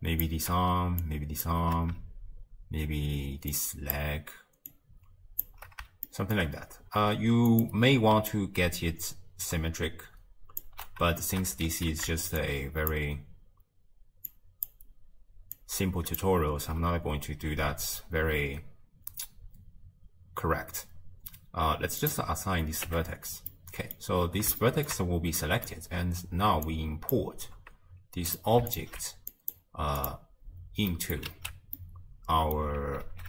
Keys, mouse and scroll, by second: 0.3-4.9 drag, 5.4 shift+click, 6.1-7.6 shift+middle drag, 7.6 click, 11.7 alt+z, 12.9 shift+click, 14.7 shift+click, 16.2 shift+click, 22.2-22.9 drag, 22.9 Tab, 23.5-24.2 middle drag, 24.2-24.7 scroll down 2, 24.7-26.8 shift+middle drag, 26.8 click, 28.3 click, 30.0 click, 30.9-31.3 middle drag, 31.3 alt+q, 31.8-33.1 middle drag, 33.1 alt+z.